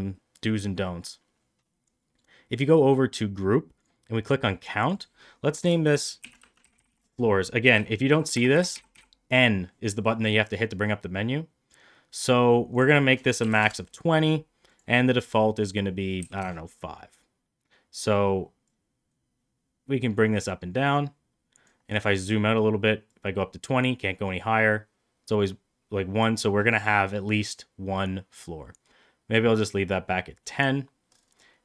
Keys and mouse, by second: 4.7 click, 4.8-6.9 drag, 6.6-8.8 typing, 12.6-14.3 drag, 14.7-16.9 drag, 18.7-21.5 drag, 23.0-30.5 drag.